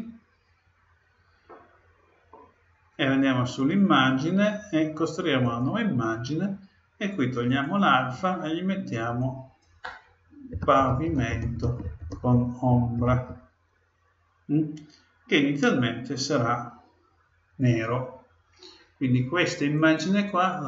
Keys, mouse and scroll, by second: 1.5-3.4 middle drag, 3.9-5.7 drag, 17.4-19.4 middle drag, 19.7-20.6 drag.